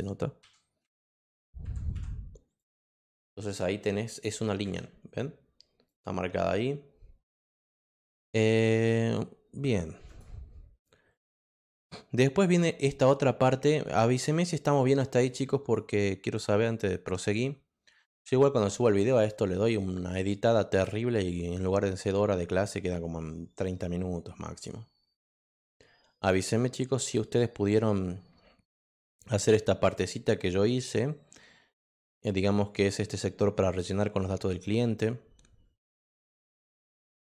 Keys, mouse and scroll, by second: 2.5 click, 4.1 click, 5.8 click, 10.0 click, 15.2 click.